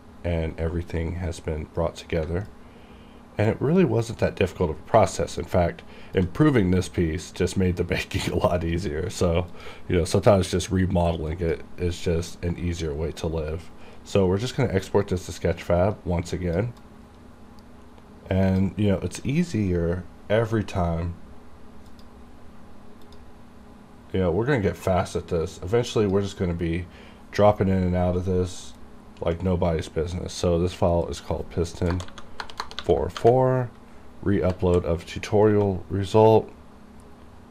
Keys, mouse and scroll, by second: 2.7 click, 5.5-8.3 shift+right drag, 9.7 click, 15.4-16.9 drag, 16.9-22.0 drag, 22.0 click, 26.0 click, 26.1 click, 29.0-30.9 scroll down 1, 31.2 click.